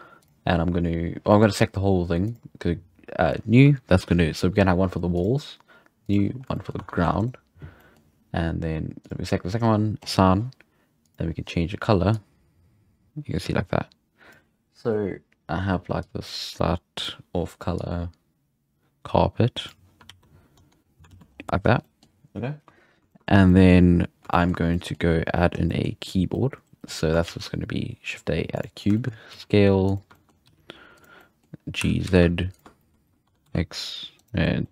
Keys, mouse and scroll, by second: 0.2 click, 1.3-2.2 middle drag, 2.2-6.4 drag, 6.4 shift+scroll down 1, 6.6 shift+middle click, 6.8 Tab, 7.0 3, 7.2-7.8 right drag, 7.8-9.0 middle drag, 9.0-12.2 drag, 20.1 alt+a, 20.6 Tab, 20.8 scroll down 6, 21.1 alt+a, 21.3-21.8 scroll up 4, 21.8-24.6 shift+middle drag, 24.6 scroll down 1, 24.7 middle click, 25.0-25.7 scroll up 5, 25.7-26.0 middle drag, 27.2 shift+a, 28.8 scroll down 1, 29.0 shift+middle click, 29.4 s, 30.2 shift+middle click, 30.3 scroll up 1, 30.4 g, 31.2-31.8 middle drag, 31.8 g, 32.8-33.3 shift+middle drag, 33.3 Tab, 33.4 3, 34.2 right click, 34.4 scroll up 1, 34.6 middle click.